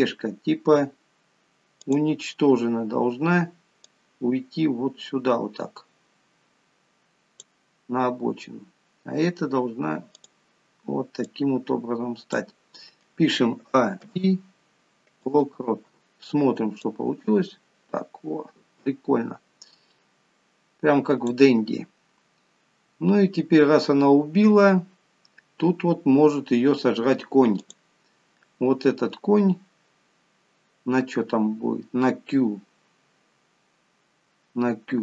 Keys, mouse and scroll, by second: 0.1 click, 2.2 click, 2.7 scroll down 2, 4.2 click, 8.9-9.6 scroll up 3, 10.5 click, 11.6 click, 13.9 a, 14.4 i, 17.1 click, 22.5 scroll down 2, 26.4-27.9 scroll up 2, 27.9 click, 29.2 scroll down 1, 30.2-30.8 scroll down 1, 31.3-33.9 scroll down 2, 34.0 scroll up 2.